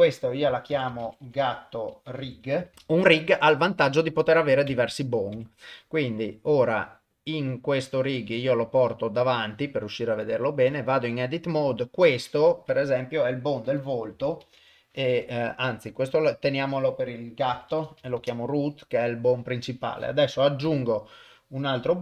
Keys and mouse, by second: 1.4 o, 4.7 Tab, 5.3 Tab, 7.5-8.4 drag, 10.2 click, 10.7 Tab, 11.5 click, 12.4 F2, 16.0 F2, 17.9 o, 20.7 shift+a.